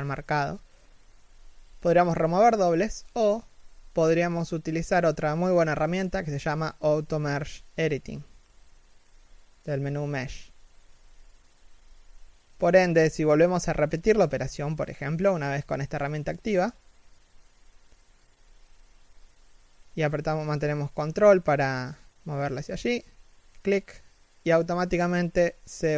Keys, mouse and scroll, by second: 0.3 scroll down 1, 0.3 shift+middle click, 2.3 3, 2.7 z, 10.4 a, 11.3 l, 15.6 middle click, 16.7 3, 17.1 z, 17.9 g, 19.5-20.1 scroll up 1, 21.4 g, 23.5 middle click, 24.0 z, 24.3 middle click.